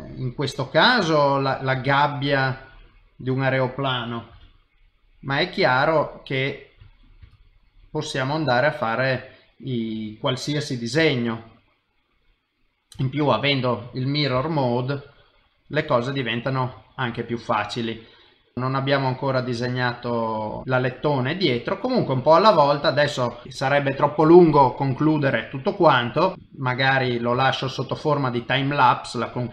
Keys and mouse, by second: 0.3 middle click, 1.1 shift+middle click, 1.7 s, 4.3 g, 5.4 middle click, 7.2 shift+d, 8.4 middle click, 11.0 s, 12.3 middle click, 13.0 shift+middle click, 14.4 g, 15.5 middle click, 16.8 shift+middle click, 17.2 middle click, 19.3 click, 19.6 shift+middle click, 20.1 middle click, 20.9 middle click, 23.4 ctrl+s, 25.4 middle click, 26.3 middle click, 26.5 middle click, 27.4 shift+middle click, 27.8 middle click.